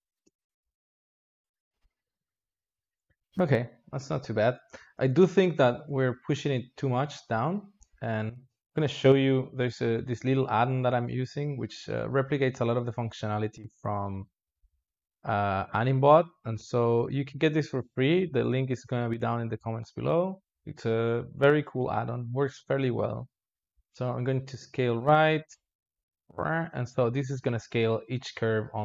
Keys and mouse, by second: 0.1 space, 0.6 alt+shift+z, 4.4 space, 4.9 alt+shift+z, 6.0 shift+click, 6.9 shift+click, 12.5 click, 14.1-24.4 drag, 25.3-28.8 drag.